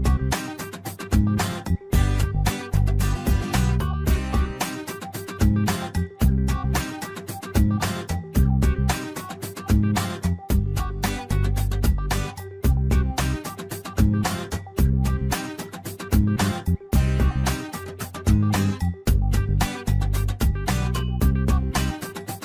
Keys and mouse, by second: 1.7 click, 1.9-3.7 drag, 4.2 shift+middle click, 5.7 shift+middle click, 6.4 shift+middle click, 7.3 shift+middle click, 8.9 shift+middle click, 10.6 ctrl+right click, 11.7 shift+middle click, 12.5 click, 14.5 shift+middle click, 16.2 shift+middle click, 16.9 shift+middle click, 18.0 ctrl+r, 20.6 shift+middle click, 21.4 shift+middle click.